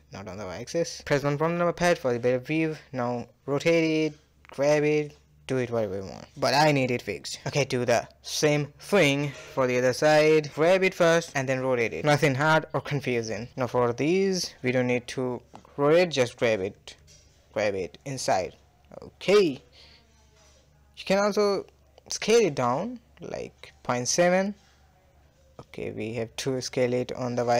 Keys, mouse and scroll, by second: 0.7 KP_1, 1.6-2.3 scroll up 4, 2.0 shift+middle click, 2.3-3.2 shift+middle drag, 3.2 r, 4.0 g, 4.9-5.3 scroll down 1, 5.3-6.7 shift+middle drag, 6.7 click, 7.3 shift+click, 7.9 KP_1, 8.5 g, 9.4 r, 10.3 g, 11.5 click, 11.8-12.6 middle drag, 12.6 shift+click, 13.0 scroll down 1, 13.2-14.0 middle drag, 14.0-14.3 scroll down 1, 14.3-15.3 middle drag, 15.3 g, 16.6 click, 17.1 shift+click, 17.6 g, 18.0 KP_1, 18.9-19.4 scroll up 5, 19.4-20.0 shift+middle drag, 20.0 scroll up 1, 20.2-21.2 shift+middle drag, 21.2 g, 22.0 s, 23.0-24.1 middle drag, 24.1 scroll down 1, 24.2 middle click, 24.7 s, 26.6-27.5 middle drag.